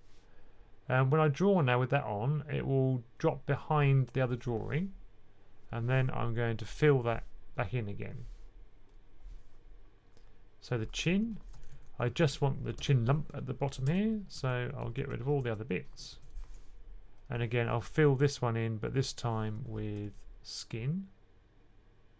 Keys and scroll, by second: 11.6 typing, 12.7 1, 19.9 2.